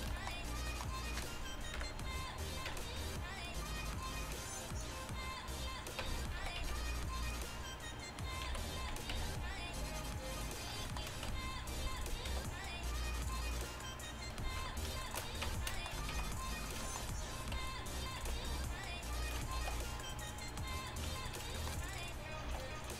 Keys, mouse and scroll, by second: 0.0 middle click, 1.8 KP_1, 2.7 Tab, 3.4-5.9 drag, 6.1 Tab, 6.4 a, 6.6 a, 7.3-8.5 drag, 8.5 ., 9.2 s, 10.7 middle click, 11.3 Tab, 12.3 g, 14.7 ,, 15.5 Tab, 16.2 z, 16.4 click, 17.7 click, 18.3 b, 19.7 shift+s, 21.1 Tab, 22.5 ctrl+alt+shift+c.